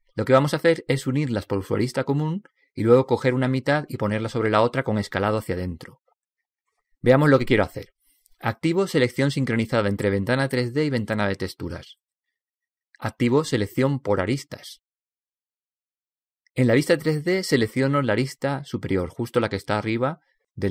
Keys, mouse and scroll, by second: 11.4 click, 14.6 click, 15.5-17.3 middle drag, 18.4 right click.